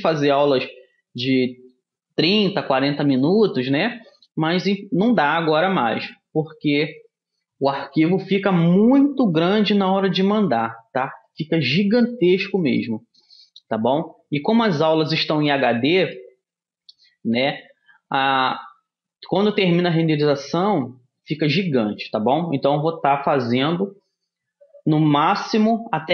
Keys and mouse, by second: 2.8-7.1 middle drag, 11.5-17.8 middle drag, 19.9-26.1 middle drag.